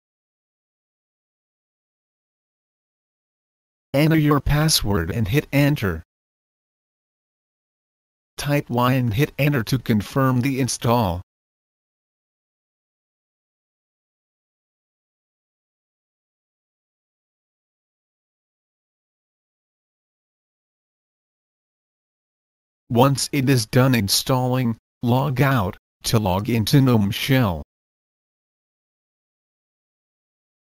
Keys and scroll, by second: 0.0-1.0 typing, 3.4 typing, 5.1 Return, 8.5 typing, 9.7 Return.